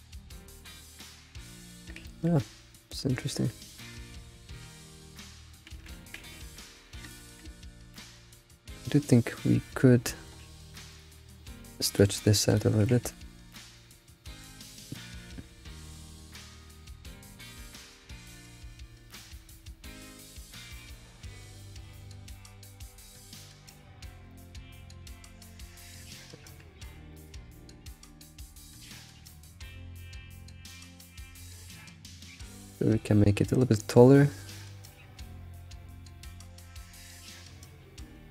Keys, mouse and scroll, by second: 2.1 shift+middle drag, 2.3-2.7 scroll up 3, 4.8-5.3 scroll down 2, 6.0 ctrl+z, 6.3 ctrl+z, 7.1-7.5 shift+middle drag, 7.5-8.0 scroll up 6, 8.5 Tab, 9.2 click, 9.6 click, 10.1 shift+middle click, 10.9 ctrl+click, 12.5 click, 12.8 g, 23.1 shift+middle click, 23.8-24.3 scroll down 8, 24.3 shift+middle click, 25.2 g, 26.1 shift+middle click, 26.3-27.7 scroll up 10, 26.8 a, 27.1 shift+middle click, 27.9 g, 30.2-33.2 shift+drag.